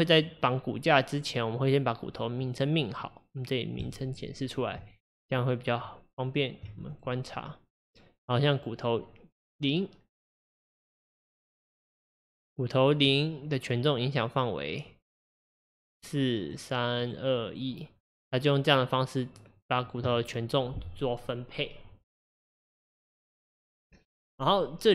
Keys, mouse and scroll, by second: 1.5 click, 2.5 click, 3.8 click, 4.8 Tab, 6.9 click, 11.3-14.4 drag, 15.8 click, 16.4 click, 17.0 click, 17.5 click.